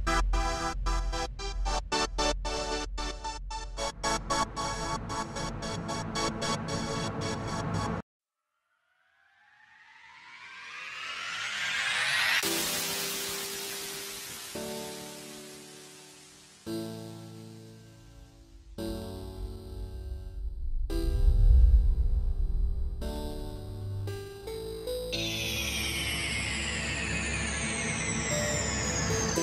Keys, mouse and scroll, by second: 0.5-0.9 scroll down 3, 0.9 click, 2.2 click, 2.2 r, 3.5 click, 6.4 click, 6.4 KP_Decimal, 6.6-6.9 scroll down 2, 6.7 middle click, 7.0 click, 7.8 click, 7.8-8.1 scroll up 3, 7.9 middle click, 8.2 click, 10.0 click, 10.0 r, 10.5 r, 11.3 alt+a, 11.4-11.8 scroll down 7, 11.6 shift+middle click, 11.8 middle click, 12.3 scroll up 1, 12.7 scroll down 1, 12.8 shift+middle click, 13.0 middle click, 13.2-14.0 scroll down 3, 13.3 middle click, 13.7 click, 14.3 alt+d, 14.6 shift+middle click, 14.8 r, 16.0 click, 16.5-16.9 scroll up 3, 16.6 middle click, 16.9 click, 17.9 click, 17.9 scroll up 2, 18.0 shift+middle click, 18.3 scroll down 4, 18.5-18.8 scroll up 2, 18.6 shift+middle click, 18.8 middle click, 19.5 shift+middle click, 19.7 middle click, 20.2 scroll down 3, 20.3 middle click, 20.7 s, 21.3 click, 21.6 shift+middle click, 21.7 scroll up 2, 21.8 middle click, 22.2 r, 23.3 scroll down 1, 23.3 middle click, 23.6 click, 24.6 click, 24.9 scroll down 2, 25.0 shift+middle click, 25.1-25.7 scroll up 3, 25.2 middle click, 25.7 r, 28.0 s.